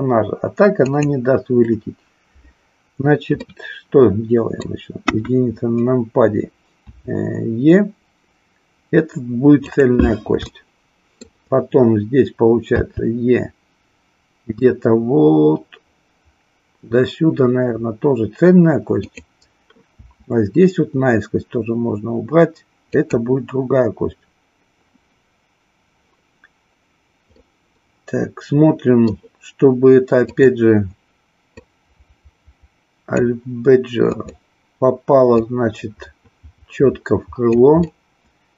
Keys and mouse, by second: 0.8 click, 3.4-4.7 middle drag, 5.0 KP_1, 6.8 e, 9.7 click, 10.4 shift+middle click, 12.8 e, 19.1 click, 19.9 e, 22.9 click, 27.4-29.2 middle drag, 30.3 click, 31.5-33.2 drag, 34.0 click, 35.4-37.5 drag, 37.9-38.5 middle drag.